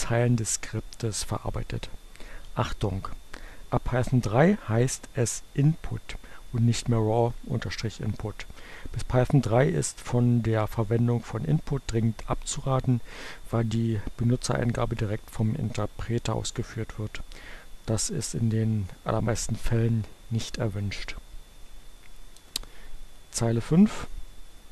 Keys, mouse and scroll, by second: 20.9 Return.